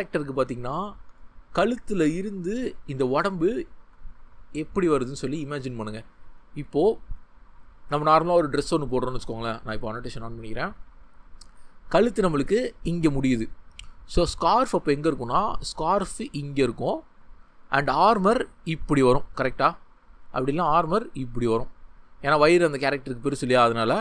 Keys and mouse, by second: 7.6 click, 10.6 click, 12.5-20.1 drag, 20.2 ctrl+z.